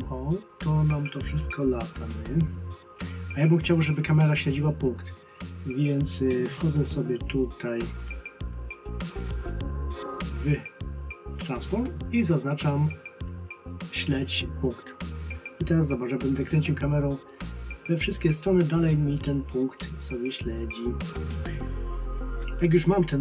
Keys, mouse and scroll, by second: 8.7 click, 13.9 click, 16.6 click.